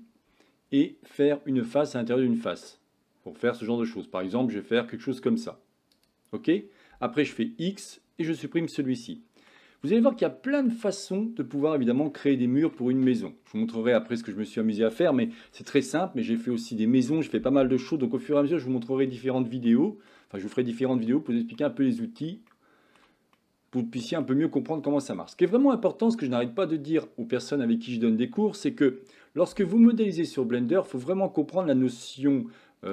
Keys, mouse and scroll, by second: 7.3 x, 8.8 middle click, 11.1-12.3 middle drag, 12.4 shift+middle click, 13.0 middle click, 19.7 shift+middle click, 20.4 middle click, 21.6 middle click, 22.6 shift+middle click, 23.5 middle click.